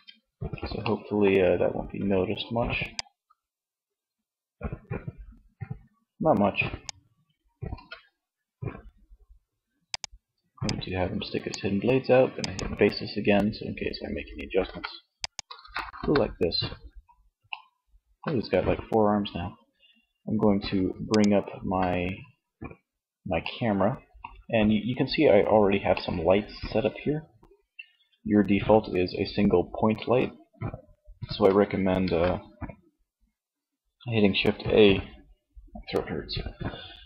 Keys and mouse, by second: 6.7 ctrl+s, 10.8-13.0 middle drag, 13.7 ctrl+s, 14.9 KP_1, 20.2-21.9 drag, 22.6-25.1 middle drag, 30.9 shift+a.